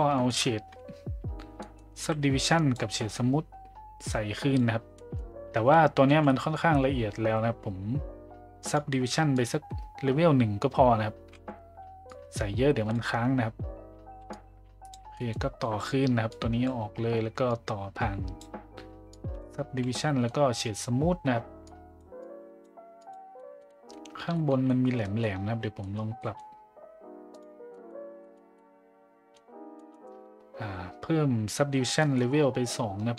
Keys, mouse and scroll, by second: 0.2 middle click, 1.6 middle click, 2.4-2.8 drag, 2.9 middle click, 4.1-4.6 drag, 5.0 middle click, 8.7 click, 9.3 click, 12.1 click, 14.3-14.9 drag, 15.2 middle click, 16.3-16.7 drag, 17.4 click, 19.2 click, 19.9 middle drag, 21.7 click, 22.2-22.7 drag, 23.0 click, 23.3 middle drag, 23.6 middle drag, 24.3 shift+middle drag, 24.7 middle click, 25.0 middle drag, 25.8 middle click, 26.2 middle click, 27.3 click, 27.7 middle click, 28.3 middle click, 28.5-29.3 middle drag, 29.7 middle click, 32.0 middle drag.